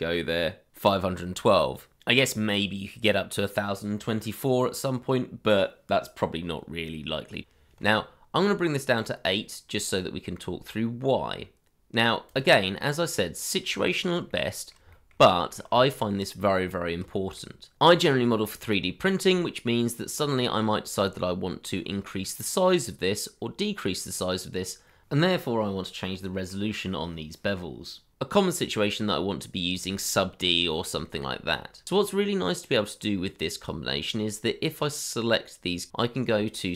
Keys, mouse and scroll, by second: 8.4-9.1 scroll up 1, 9.1-11.0 scroll down 1, 13.2 middle click, 13.9 shift+middle click, 14.5 middle click, 14.9 shift+middle click, 15.5 middle click, 15.8 shift+middle click, 16.1-16.6 scroll up 1, 16.7 middle click, 17.1 shift+middle click, 19.2-20.9 scroll down 1, 20.9-22.6 scroll up 1, 22.6 middle click, 24.0 scroll up 1, 24.9 middle click, 27.8 middle click, 28.7 middle click.